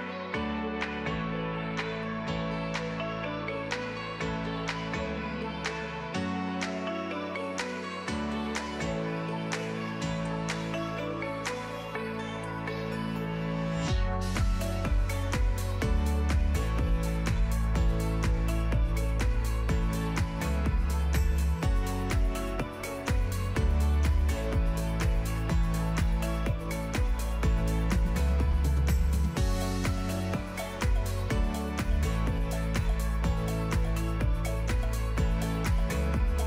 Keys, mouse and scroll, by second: 0.6 g, 1.7 middle click, 2.0-5.0 typing, 6.6 click, 6.9 r, 8.3 g, 9.8 click, 10.0 r, 11.4 r, 12.1 click, 12.4 KP_0, 12.7 g, 13.7 h, 13.8 click, 14.0 click, 14.7 click, 14.8 KP_0, 15.1 alt+h, 15.3 ctrl+s, 15.6 shift+a, 16.2 click, 16.4 shift+d, 16.6 alt+g, 18.4 g, 19.0 g, 19.5 middle click, 19.6 scroll down 4, 19.6 middle click, 19.7 g, 20.2 KP_0, 20.5 ctrl+b, 20.8-21.5 drag, 22.0-22.4 drag, 22.4 z, 23.1 alt+h, 23.7 click, 24.1-26.5 typing, 24.7 alt+h, 25.7 click, 28.6 ctrl+s, 29.4 click, 30.3 ctrl+s, 30.4 scroll up 2, 30.6 click, 30.9 click, 31.0 click, 31.4 s, 31.7 click, 32.6 click, 33.8 click, 34.6 click, 34.9-36.3 drag.